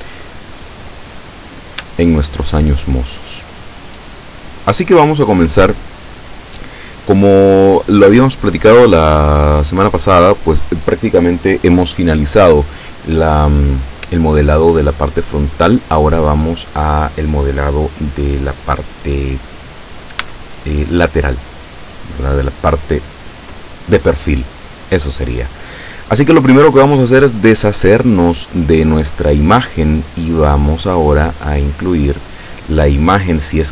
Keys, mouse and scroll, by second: 0.9-1.3 scroll up 2, 1.3-1.7 scroll down 2, 2.0 shift+click, 4.4 click, 20.3 n, 28.4 click, 31.2 click.